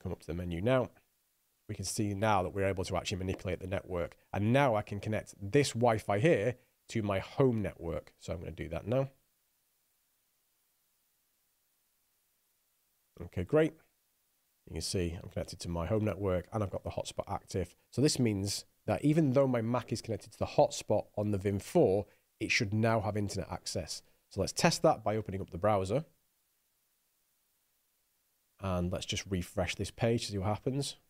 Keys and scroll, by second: 27.7 super+Tab.